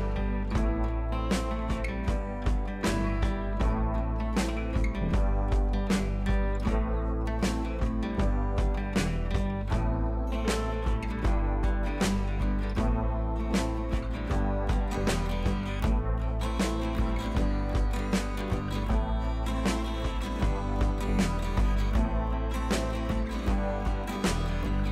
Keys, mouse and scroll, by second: 0.4 shift+click, 2.3 ctrl+z, 2.7-7.8 drag, 7.9 scroll down 1, 9.9-11.0 scroll up 1, 11.1-13.9 drag, 14.0-14.9 scroll down 1, 17.9 click, 18.6-19.7 scroll up 1, 20.5-23.8 drag, 23.9-24.3 scroll up 1, 24.3 click, 24.5-24.9 scroll up 1.